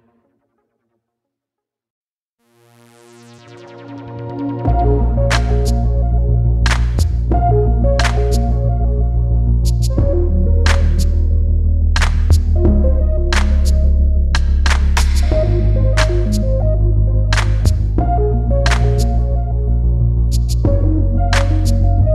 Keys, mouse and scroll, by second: 0.3 shift+c, 0.8-1.5 scroll down 1, 3.7 click, 4.8 ctrl+c, 8.8 scroll down 1, 8.9 scroll up 1, 9.4 click, 11.1 ctrl+a, 11.6 ctrl+v, 12.6 click.